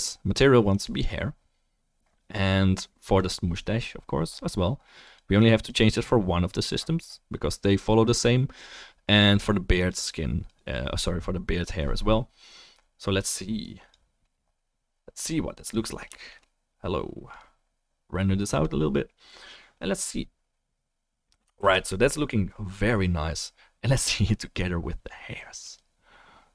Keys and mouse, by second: 3.7-5.0 drag, 5.0-8.4 middle drag, 8.4-9.7 drag, 9.7-14.8 middle drag, 15.7-17.4 drag, 21.6 ctrl+s, 24.5-26.5 drag.